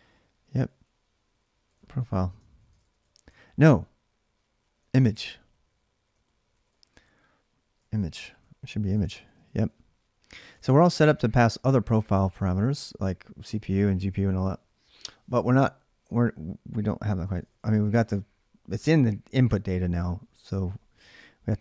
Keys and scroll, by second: 0.0-13.0 typing, 8.7 ctrl+[, 10.2 ctrl+[, 11.9 ctrl+[, 17.0-17.9 typing.